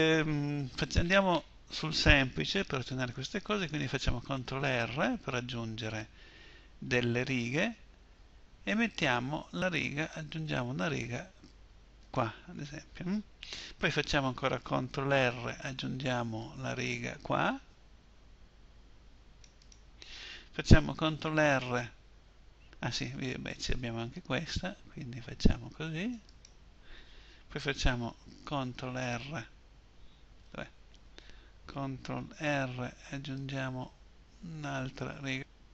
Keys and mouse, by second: 4.0 ctrl+r, 11.5-14.5 middle drag, 14.5 ctrl+r, 19.1-20.6 middle drag, 20.6 ctrl+r, 28.2 ctrl+e, 31.8 ctrl+r.